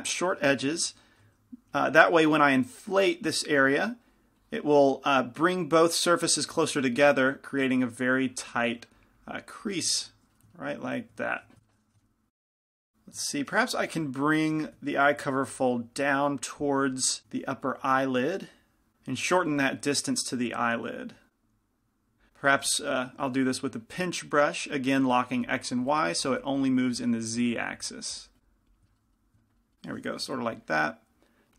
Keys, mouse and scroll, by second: 1.5 i, 1.5 f, 2.4 f, 2.9-11.7 drag, 6.2-11.7 middle drag, 12.0 g, 12.0 f, 12.6 click, 14.8 f, 15.6 f, 16.2-17.5 drag, 17.1-19.6 typing, 18.5 click, 18.9 ctrl+z, 20.8-29.6 drag, 26.4 p, 26.4 f, 28.9-31.5 middle drag, 29.5 right click, 30.6 g, 30.6 f.